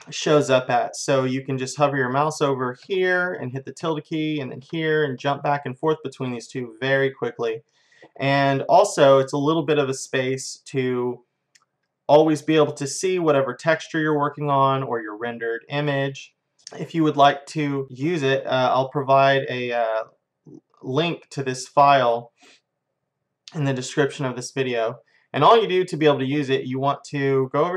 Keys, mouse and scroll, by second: 3.8 `, 5.2 `, 14.0-16.6 middle drag.